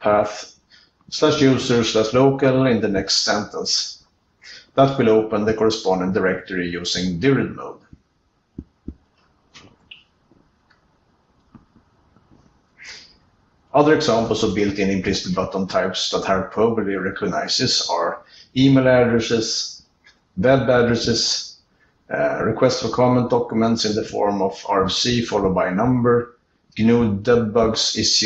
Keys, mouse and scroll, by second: 2.1 ctrl+n, 4.7 alt+Return, 7.8 c.